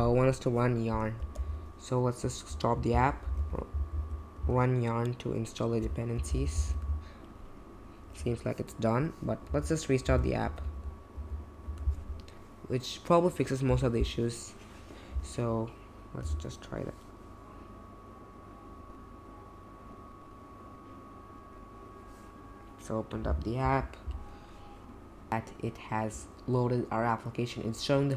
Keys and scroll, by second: 1.3 super+j, 2.9 ctrl+c, 3.0-4.4 typing, 6.0-7.1 typing, 9.4 Up, 9.8-11.1 typing, 11.1 Up, 11.6 Return, 16.2 typing.